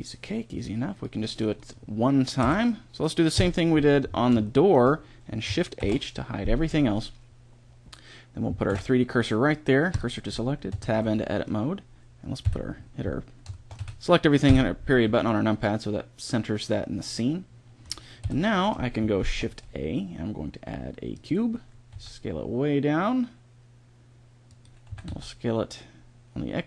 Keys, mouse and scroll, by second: 0.8-2.2 drag, 2.2 KP_1, 3.2 KP_5, 5.6 shift+h, 8.5 shift+s, 10.6 Tab, 12.3 KP_Decimal, 13.6 a, 14.3 KP_Decimal, 14.9 a, 18.0 KP_1, 19.1 shift+a, 21.8 s, 24.7 s.